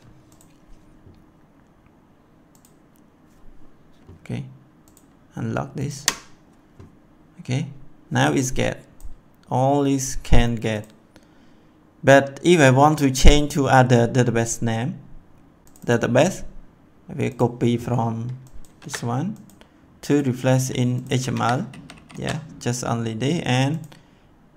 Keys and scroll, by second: 5.9 F5, 18.8 ctrl+c, 21.3 ctrl+v, 21.7 ctrl+s.